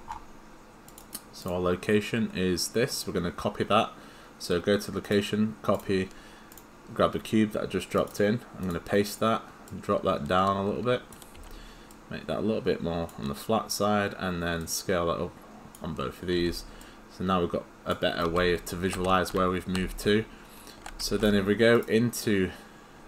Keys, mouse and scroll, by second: 1.0 right click, 1.4 click, 5.1 right click, 5.8 click, 6.5 click, 8.0 right click, 8.6 click, 11.4 r, 12.1 click, 16.4 w, 16.8 click, 18.0-19.1 typing, 18.2 right click.